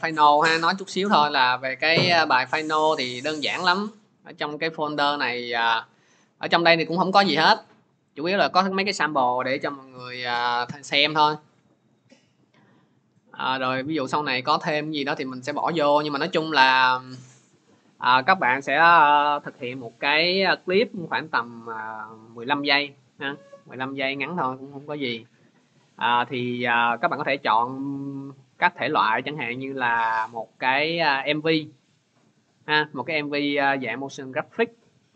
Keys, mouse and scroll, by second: 1.4-1.7 scroll, 2.4 click, 2.6 click, 5.2 click, 7.2 click, 7.6 click, 9.9 click, 10.1 click, 16.3 click, 17.4 click, 31.4 click, 32.7 click, 32.9 click.